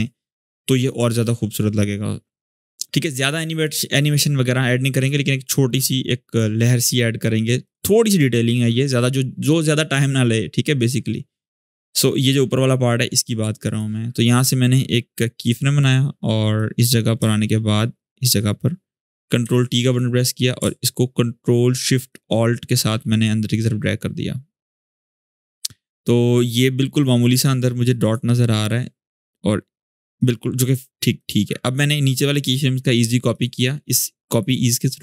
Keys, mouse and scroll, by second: 3.4 click, 11.2-19.2 drag, 16.6-18.2 drag, 19.2 ctrl+t, 21.8-25.0 ctrl+alt+shift+drag, 29.9-30.8 drag.